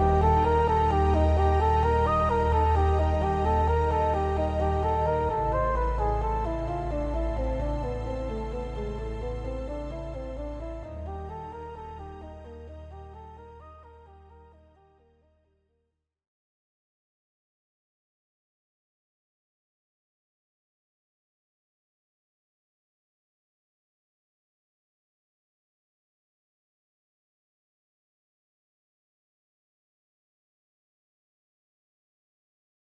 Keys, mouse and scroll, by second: 0.3-3.4 drag, 3.4-6.3 middle drag, 5.4-6.3 scroll down 2, 6.3-7.7 drag, 7.7-8.4 middle drag, 8.4 click, 8.8 click, 10.0 Tab, 10.2 a, 10.4-14.0 right drag, 11.7 Escape, 12.9 p, 13.8 Tab, 14.0 click, 14.3 Tab, 14.6 a, 15.1 shift+n, 15.5 Tab, 15.8 click, 16.2 Tab, 16.4 a, 17.1 shift+n, 17.5 Tab, 18.7-23.8 drag, 19.4 Escape, 19.8 q, 23.2 q, 23.8-25.7 middle drag, 24.2 scroll up 2, 25.7 shift+click, 25.9 scroll down 2, 26.1-26.6 middle drag, 26.6 shift+click, 27.1 shift+click, 27.8 shift+click, 28.1-29.3 middle drag, 28.9 ctrl+j, 29.3 click, 29.7-32.9 middle drag, 31.4 scroll up 1, 32.3 scroll down 1.